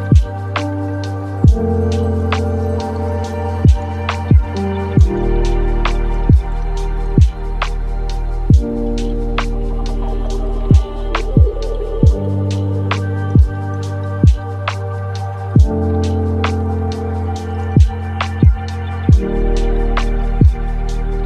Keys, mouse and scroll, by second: 1.1-4.7 drag, 4.7-6.1 middle drag, 6.1-6.5 scroll up 4, 6.5-9.6 drag, 11.1-12.3 middle drag, 12.3 click, 13.1-15.2 middle drag, 15.2-18.3 shift+drag, 20.7-21.2 drag.